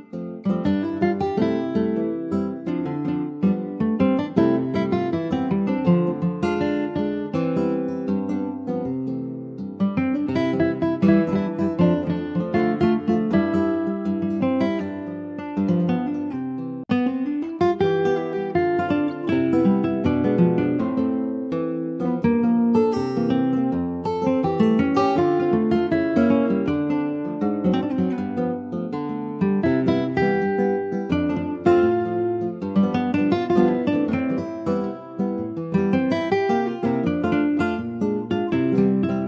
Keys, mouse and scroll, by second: 0.8 ctrl+b, 2.5 click, 3.4 ctrl+b, 5.4 click, 5.8 middle click, 6.4 ctrl+b, 11.1 Tab, 11.3 click, 11.5-11.8 scroll down 2, 11.8-13.1 middle drag, 13.1 ctrl+s, 13.1 click, 13.3-14.5 middle drag, 14.5-14.9 scroll up 1, 15.6-16.7 middle drag, 16.7 ctrl+z, 17.0-18.2 ctrl+z, 19.2 middle click, 19.5-19.9 scroll up 1, 19.9 click, 20.4 middle click, 20.8 click, 21.6 shift+click, 22.5 shift+click, 22.9-24.1 middle drag, 24.1 shift+d, 24.9 middle click, 25.8 d, 32.2 middle click, 33.1 e, 35.0 click, 35.2 middle click, 35.7-36.3 scroll up 1, 36.3 middle click, 36.9 |.